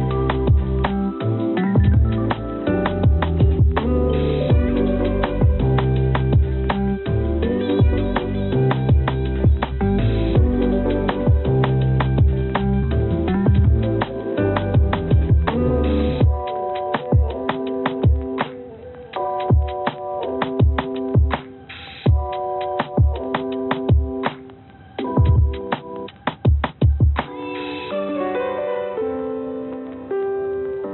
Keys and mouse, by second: 0.0 click, 1.2 click, 2.5 click, 6.9 click, 7.7 click, 8.5-10.2 drag, 10.6-10.9 drag, 11.2 click, 11.8 shift+click, 13.2-14.3 drag, 15.5-16.9 shift+drag, 17.6 shift+click, 18.3 click, 20.4 x, 28.5 click, 30.8 click.